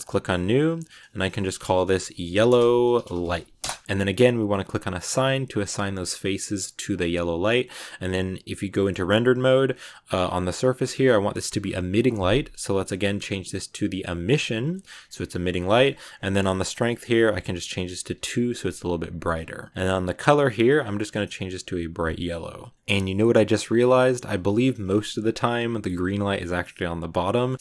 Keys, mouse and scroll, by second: 0.7-2.1 drag, 2.1 l, 3.8 scroll up 5, 5.0-6.7 drag, 6.7 Tab, 8.4 scroll down 1, 8.7 middle click, 9.2 scroll down 4, 10.3-13.5 drag, 14.6-17.1 middle drag, 17.1-18.1 drag, 19.7 click, 22.7 middle click, 23.1 scroll up 1, 23.1 middle click, 23.5-23.9 scroll down 2, 23.9 middle click, 24.5-25.2 scroll up 3, 25.2 scroll down 2, 27.2 middle click, 27.4 scroll up 2, 27.5 shift+middle click.